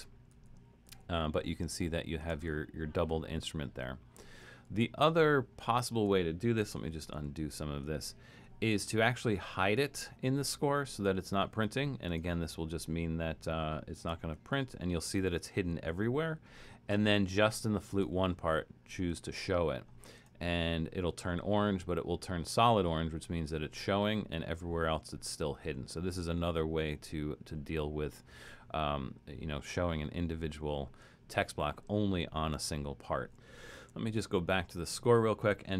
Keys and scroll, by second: 0.3 alt+super+,, 0.9 alt+super+,, 1.5 alt+super+,, 4.6 alt+super+,, 6.8 super+z, 7.2 super+z, 14.3 alt+super+., 23.9 alt+super+., 24.9 alt+super+., 25.6 alt+super+,, 26.3 alt+super+,, 33.9 alt+super+/.